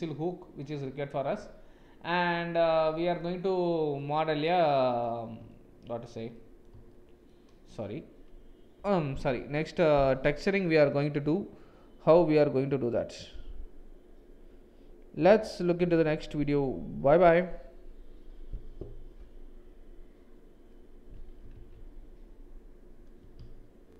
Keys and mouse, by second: 0.7-3.2 middle drag, 4.0 middle click, 5.5 shift+middle click, 6.3 middle click, 6.9 shift+middle click.